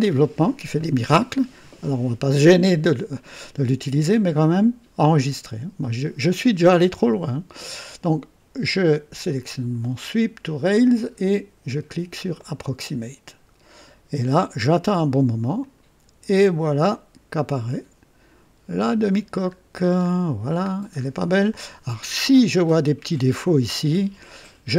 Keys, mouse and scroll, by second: 12.3 click, 15.6-19.0 drag, 19.3-20.3 scroll up 3, 20.7 scroll down 2, 21.5-23.4 drag, 23.7 right click.